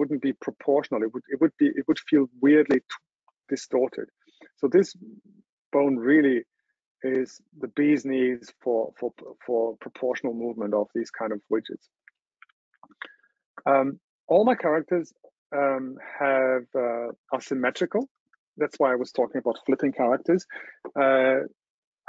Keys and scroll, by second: 12.6 super+0.